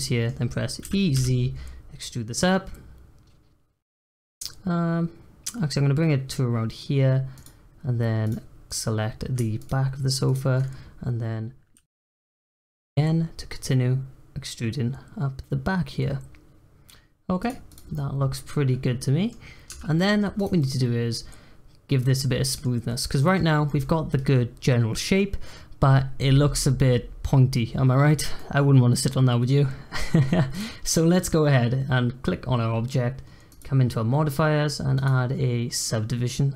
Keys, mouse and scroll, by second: 0.8 e, 8.2 click, 8.7 click, 9.5 shift+click, 10.2 shift+click, 11.7 e, 17.7 click, 17.9-19.7 middle drag, 19.7 Tab, 19.9-20.3 middle drag, 20.3 click, 20.5-22.8 middle drag, 22.8-23.2 scroll up 2, 23.2 middle click, 23.4 scroll down 1, 23.7-30.3 middle drag, 30.3 scroll up 1, 30.5 click, 30.8-33.4 middle drag, 33.4 click, 34.9-36.5 drag.